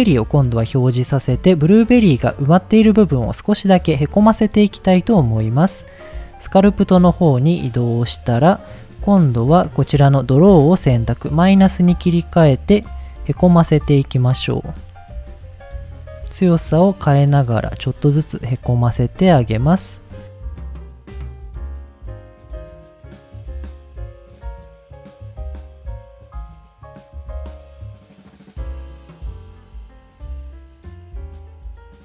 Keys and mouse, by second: 0.8 middle drag, 6.6 click, 7.7 middle click, 10.3 click, 11.6 click, 12.8 click, 13.2 click, 13.6 click, 14.0 click, 16.2 click, 17.8 click, 18.4 click, 18.7 click, 18.9 click, 19.2 click, 19.5 click, 19.7 click, 20.1 click, 20.4 middle click, 20.7 middle click, 21.2 ctrl+z, 21.2 ctrl+z, 21.6 click, 21.8 click, 22.0 click, 22.2 click, 22.4 click, 22.7 click, 23.0 middle click, 23.2 click, 23.6 ctrl+z, 23.7 click, 24.1 click, 24.3 click, 24.4 click, 24.6 click, 24.7 middle click, 25.0 click, 25.2 click, 25.4 ctrl+z, 25.4 ctrl+z, 25.6 click, 26.0 click, 26.2 click, 26.4 click, 26.7 click, 26.9 click, 27.1 click, 27.3 click, 27.5 click, 27.7 click, 27.8 middle click, 28.1 click, 28.4 click, 28.6 click, 29.0 click, 29.6 click, 29.8 click, 30.0 click, 31.2 click, 31.4 click.